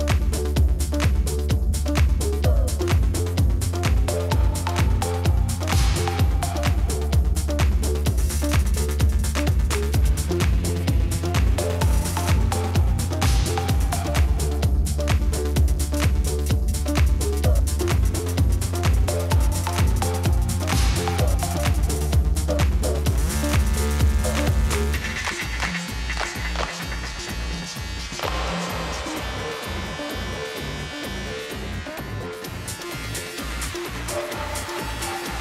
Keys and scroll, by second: 0.0-1.7 typing, 4.3 ctrl+v, 7.1 ctrl+d, 7.3 shift+Right, 7.4 shift+Right, 7.4 shift+Right, 7.8 shift+Left, 8.9-10.4 typing, 12.1 ctrl+c, 12.6 ctrl+v, 16.1 0, 17.5 Left, 17.6 Left, 17.6 Left, 17.9 Left, 17.9 Left, 18.1 Left, 19.8 Right, 20.6 Left, 22.1-23.1 typing, 24.6 ctrl+v, 26.0 ctrl+d, 26.2 shift+Right, 26.3 shift+Right, 26.6 shift+Left, 26.7 shift+Left, 27.5 Right, 27.6-30.5 typing, 32.0 ctrl+c, 32.4 ctrl+v, 33.3 Left, 33.4 Left.